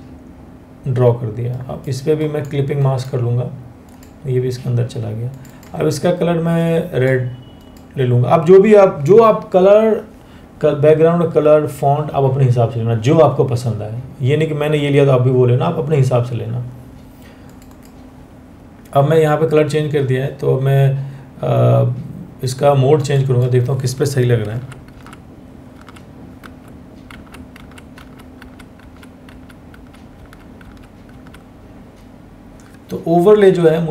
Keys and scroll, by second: 24.1 Down, 30.7 Down.